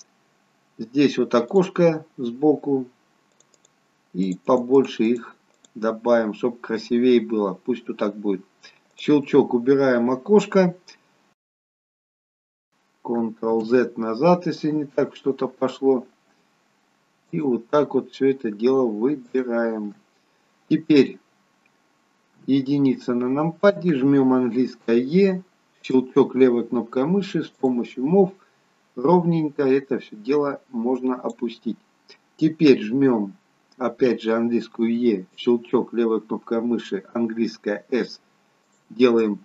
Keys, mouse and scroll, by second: 2.1-4.9 click, 5.5 click, 8.8 click, 15.0 ctrl+z, 17.1 alt+shift+click, 25.2 e, 27.5 click, 35.4 e, 37.2 s, 39.1 middle click.